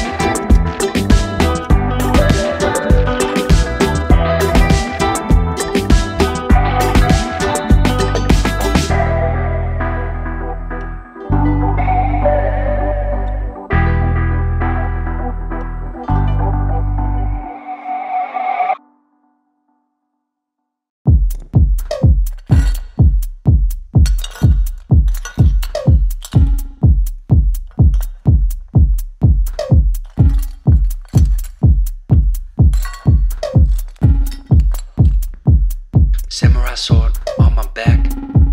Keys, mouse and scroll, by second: 2.4 click, 2.6 Up, 6.5 click, 13.6 click, 14.0 Left, 16.9 click, 22.0 click, 23.6 click, 31.7 click, 34.3 click.